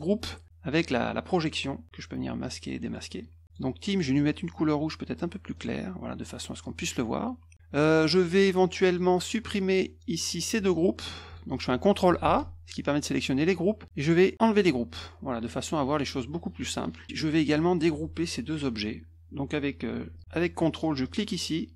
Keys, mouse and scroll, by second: 2.4 click, 2.8 click, 3.4 click, 5.5 click, 8.8 click, 10.0 click, 11.2 click, 12.2 ctrl+a, 14.5 click, 15.4 click, 15.9 click, 20.1 click, 21.0 click.